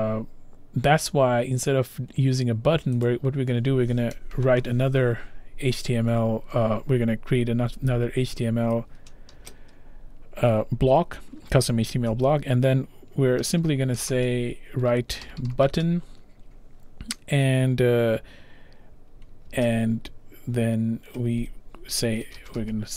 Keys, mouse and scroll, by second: 3.1 click, 9.3 typing, 13.0-16.2 typing, 19.2-20.0 typing, 22.0-22.9 typing.